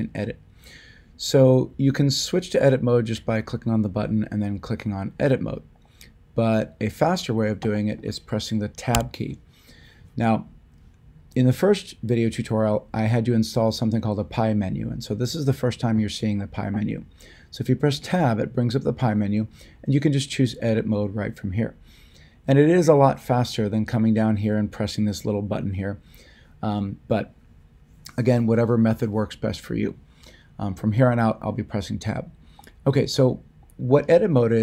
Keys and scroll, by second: 8.9 Tab.